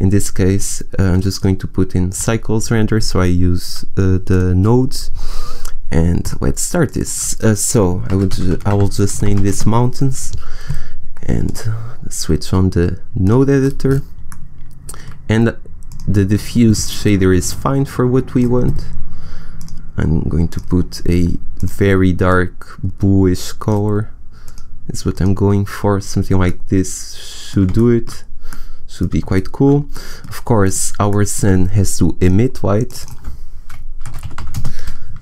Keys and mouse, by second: 6.1 click, 12.3 click, 15.7-17.6 drag, 26.4-28.8 middle drag, 30.6-32.1 right drag, 32.1-33.6 drag, 34.8 middle click.